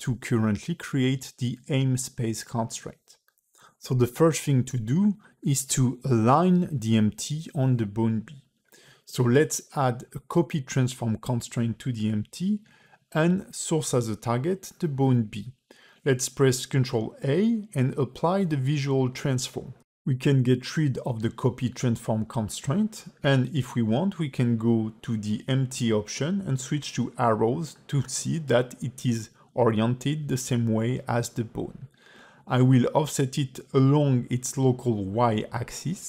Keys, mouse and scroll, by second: 0.1 ctrl+click, 0.5 ctrl+click, 1.3 a, 1.6 x, 2.2 space, 3.5-4.3 scroll up 3, 6.2 space, 7.0 click, 8.9 click, 9.7 click, 12.6 click, 14.4 click, 16.5 ctrl+a, 21.6 click, 24.8 click, 25.7 click, 30.5 g, 35.4 click.